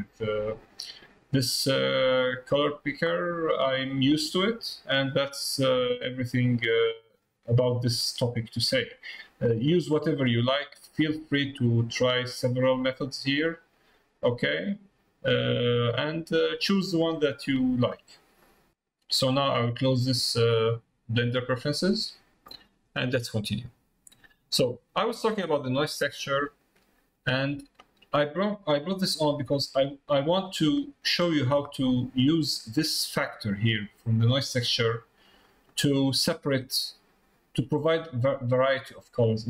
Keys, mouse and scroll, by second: 13.0 click, 13.7 click, 23.3 middle click, 24.5 click, 25.8 middle click, 27.0 middle click, 28.9 middle click, 29.5 middle click, 30.4 middle click, 31.3 middle click, 33.8 click, 35.4 middle click, 38.2 middle click.